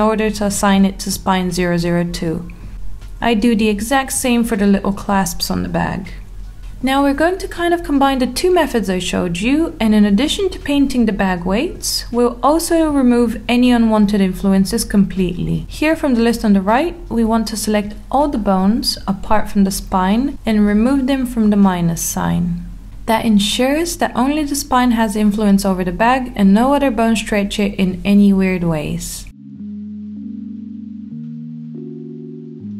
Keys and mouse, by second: 1.8-2.8 drag, 2.8 Tab, 4.0 click, 4.6 Tab, 5.9 click, 6.9 click, 8.3 alt+middle click, 9.4 Tab, 10.6 click, 14.1 click, 16.6-17.2 drag, 18.4 click, 19.1 click, 20.4 click, 22.5 click, 24.1 click, 25.3-26.6 middle drag, 27.5 click, 28.2 middle click, 28.6 Tab, 31.5 click, 32.4 click.